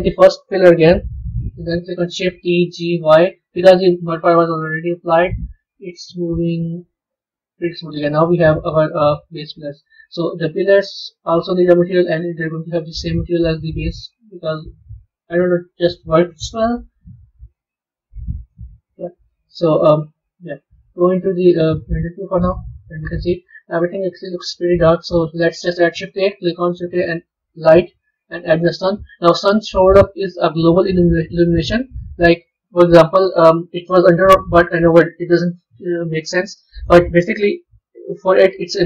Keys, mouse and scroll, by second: 0.7 KP_3, 2.3 shift+d, 8.5 a, 9.0-10.2 middle drag, 10.2 click, 11.5 click, 12.2-14.5 drag, 16.2 click, 17.3-19.0 drag, 19.0-19.8 middle drag, 19.8 a, 20.4 z, 22.9-23.8 middle drag, 23.8-25.0 scroll up 2, 25.0 shift+a, 29.4-31.5 middle drag, 31.5 g, 36.7-38.8 drag.